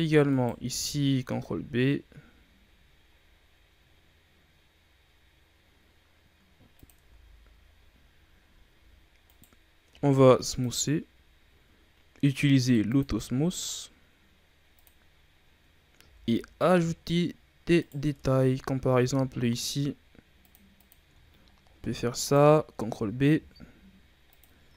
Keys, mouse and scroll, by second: 0.2 alt+right click, 1.2 ctrl+b, 6.9 Tab, 7.7 scroll down 3, 8.3-8.6 scroll up 2, 8.6 a, 9.2 right click, 9.8 w, 11.0-11.5 scroll up 5, 12.8 click, 13.6-14.7 scroll down 3, 14.7 click, 15.2-16.0 scroll down 6, 16.0 a, 16.2-16.8 scroll down 2, 16.8-17.2 scroll up 5, 17.7 right click, 18.0 Tab, 18.9 ctrl+r, 21.1-21.4 shift+scroll down 1, 21.4-22.1 scroll up 1, 22.1 alt+right click, 23.3 ctrl+b, 24.6 e.